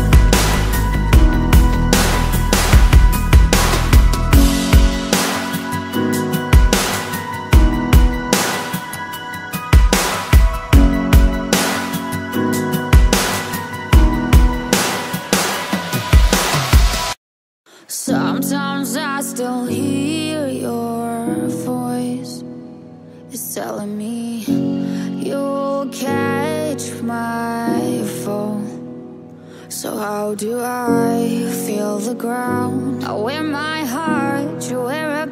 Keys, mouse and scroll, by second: 6.8 middle click, 13.6-14.3 scroll down 5, 14.5 middle click, 24.8 middle click, 30.9 middle click, 34.2 middle click.